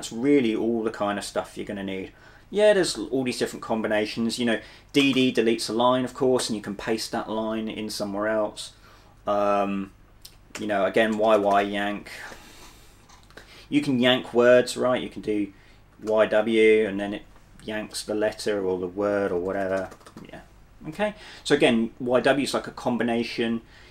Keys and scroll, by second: 5.1 d, 5.2 d, 6.5 p, 8.7-12.1 typing, 15.7-17.0 typing, 19.2-20.1 typing.